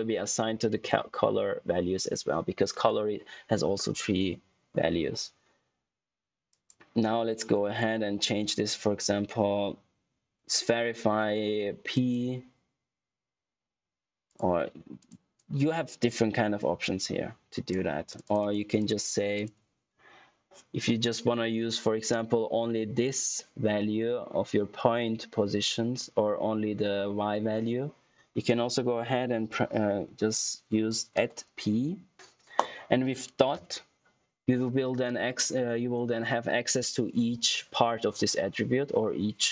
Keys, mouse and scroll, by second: 11.8 click, 14.2 click, 31.1 ctrl+alt+q, 31.7 shift+p, 33.4 shift+., 34.3 shift+..